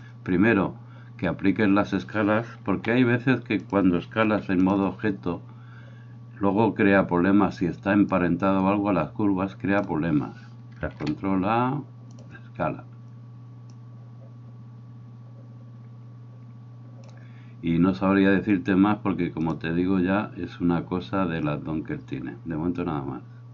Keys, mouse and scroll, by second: 0.0-3.8 drag, 2.7 s, 3.8-8.2 middle drag, 4.3 g, 8.2-21.6 drag, 11.0 ctrl+a.